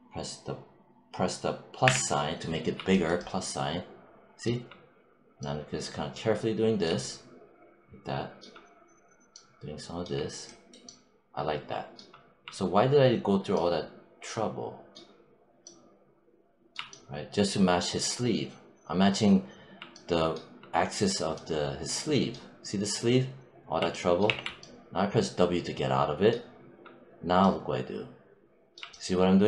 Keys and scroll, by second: 1.7 =, 24.1 w.